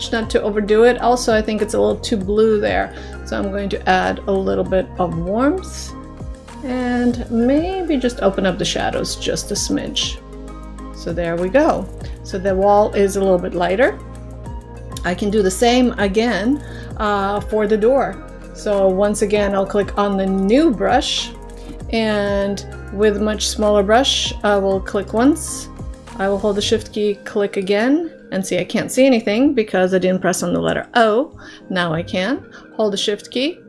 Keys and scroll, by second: 30.7 o.